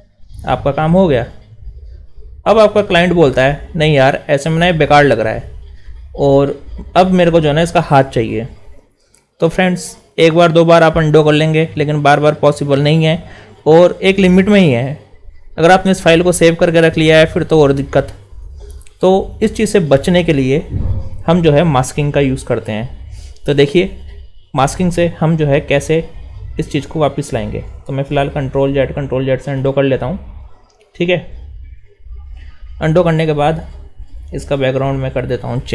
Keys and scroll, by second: 27.9 ctrl+alt+shift+s.